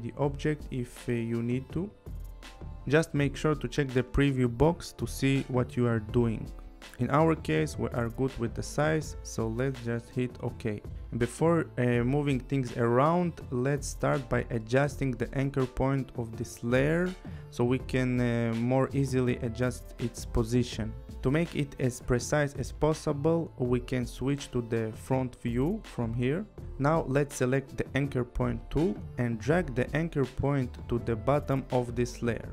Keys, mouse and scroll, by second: 9.8 click, 25.0 click, 27.1 click, 29.7 click, 31.4 click.